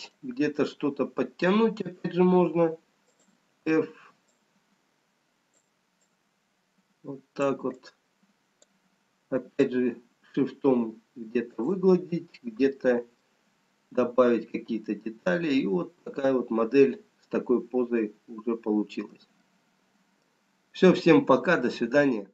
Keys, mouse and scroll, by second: 1.7-3.3 scroll up 4, 3.3 f, 6.5 click, 9.0 click, 10.2 shift+click, 12.2-13.7 scroll down 2, 13.7 middle click, 21.0 middle click.